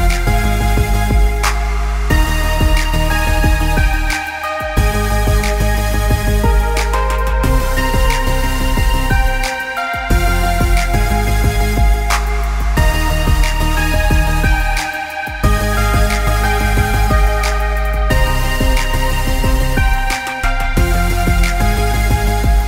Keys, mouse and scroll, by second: 0.6-1.2 scroll down 2, 0.8 middle click, 1.7 KP_1, 2.4 g, 3.9 middle click, 4.2 click, 4.8 s, 5.6 middle click, 6.1 click, 6.8 KP_1, 7.6 g, 9.4 shift+click, 9.9 g, 11.1 click, 11.3 middle click, 11.8-12.2 scroll up 3, 12.0 middle click, 13.1 click, 13.4 middle click, 14.4 s, 17.7 s, 18.9 click, 19.6 z, 20.2 click, 21.1 z, 21.8 click, 22.3 shift+click.